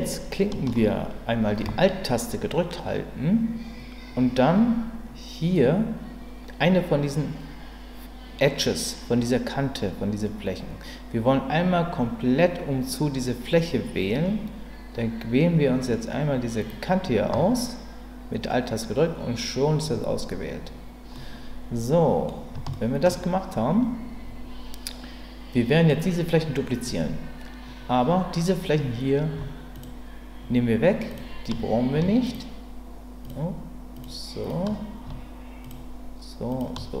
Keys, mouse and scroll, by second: 21.1-22.3 middle drag, 22.7 shift+middle click, 29.7 shift+click, 31.1 shift+click, 32.2 shift+click, 33.2 shift+click, 33.9 shift+click, 35.6 shift+click, 36.5 shift+click.